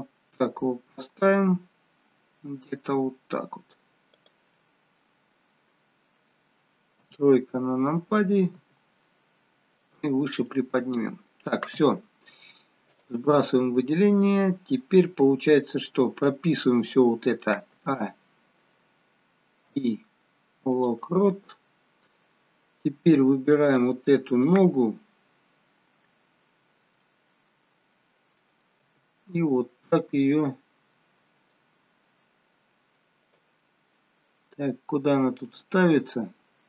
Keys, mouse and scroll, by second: 4.6 middle click, 7.1 KP_3, 8.8 g, 10.5 middle click, 11.6-12.2 scroll up 3, 12.2 scroll up 2, 12.3-12.9 scroll down 3, 12.9 click, 13.3 middle click, 17.7 a, 19.7 i, 23.8 click, 27.1 middle click, 28.8 g, 33.6 middle click, 36.4-36.6 scroll up 1.